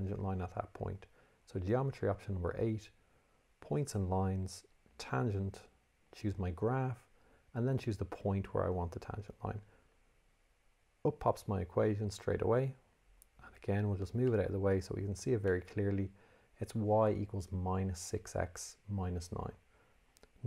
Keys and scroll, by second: 1.7 8, 3.4 1, 4.9 8, 13.0 Escape.